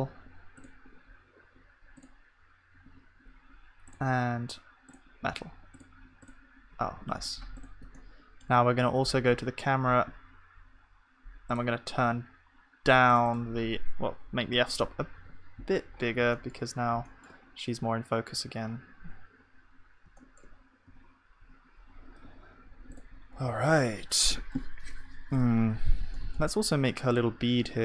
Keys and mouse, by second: 6.8-15.2 middle drag, 7.0 ctrl+s, 15.2 ctrl+s, 15.9 middle click, 16.4-18.7 middle drag, 20.9 KP_0, 23.4-24.7 drag, 23.5 ctrl+s.